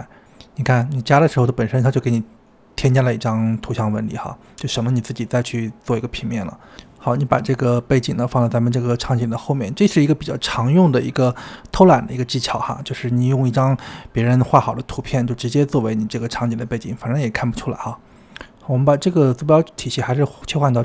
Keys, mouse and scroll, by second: 0.0 g, 1.9-2.3 drag, 2.3 g, 4.2 KP_0, 5.4 g, 6.8 s, 8.0 g, 13.2 g, 14.4-15.1 scroll down 4, 15.1-18.0 middle drag, 18.0 KP_7, 18.1 g, 18.9 g, 19.8-20.8 drag.